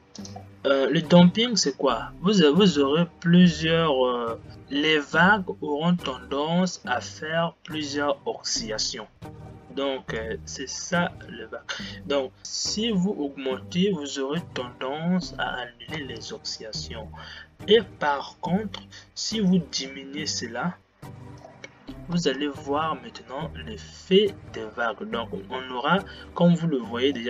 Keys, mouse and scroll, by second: 10.5-12.4 middle drag, 16.6 space.